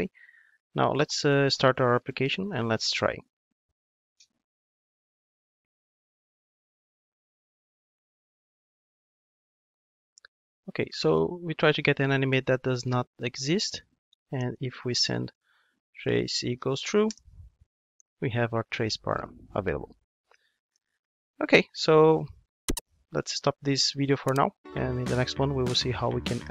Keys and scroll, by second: 2.0 ctrl+d, 22.2 ctrl+Tab.